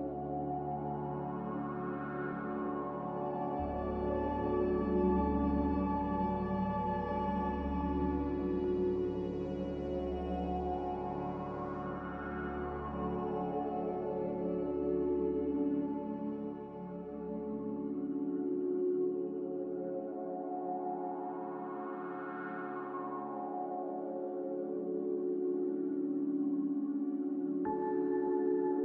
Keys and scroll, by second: 5.3 Return, 22.2-23.0 typing, 23.6 ctrl+z.